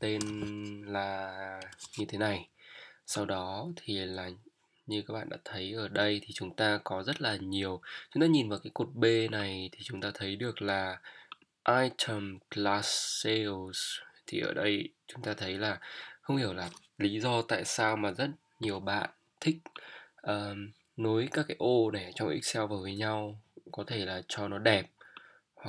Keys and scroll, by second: 0.2 t, 1.6 Return.